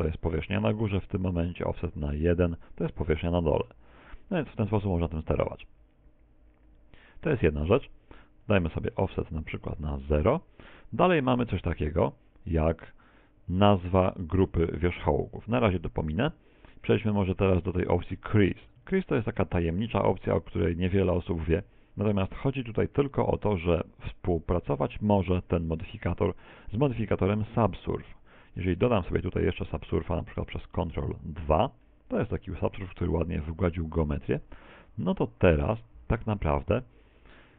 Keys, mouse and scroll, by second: 21.6 click, 21.9 click, 37.0 middle click.